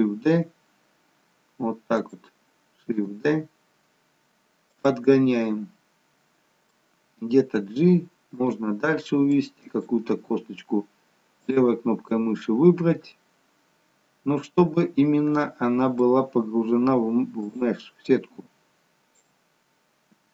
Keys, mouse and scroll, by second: 0.0 shift+d, 5.2 middle click, 5.2 shift+d, 7.5 g, 9.4 click, 10.4 g, 12.2 middle click, 18.1 click, 20.2 g.